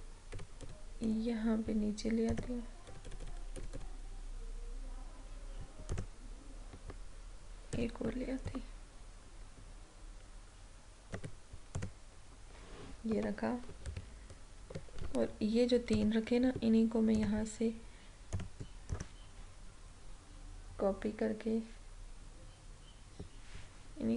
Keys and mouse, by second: 0.7 Down, 2.4 click, 3.0 Down, 6.0-11.8 drag, 13.9 ctrl+-, 16.0 click, 19.0 right click.